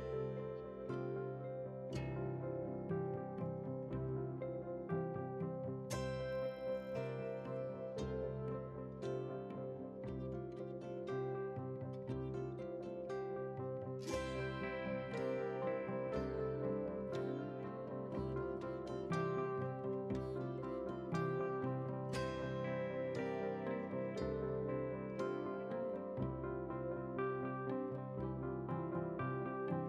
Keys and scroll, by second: 6.6 ctrl+j, 14.5 ctrl+w, 22.8 ctrl+a, 23.8 ctrl+c, 25.8 ctrl+v.